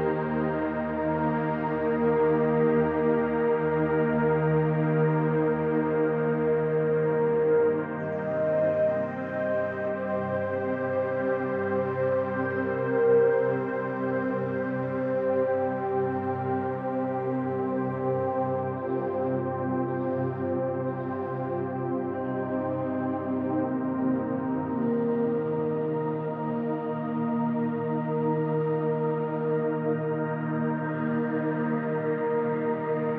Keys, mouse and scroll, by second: 0.0-0.8 typing, 0.3 click, 1.5 click, 2.0-3.0 typing, 2.2 ctrl+alt+click, 3.1-4.0 drag, 4.3 click, 5.0-6.6 ctrl+alt+drag, 6.3-9.1 typing, 6.6 click, 7.7-9.1 ctrl+alt+drag, 10.3 click, 12.3 click, 12.8 click, 13.8-17.9 typing, 14.1 click, 14.4 click, 17.3 click, 18.1 click, 18.9-20.7 drag, 20.9-21.6 drag, 22.1-23.2 drag, 24.2 click, 25.8 click, 27.0 click, 27.2 click, 29.9 click, 31.2 ctrl+alt+click, 32.4 ctrl+alt+click.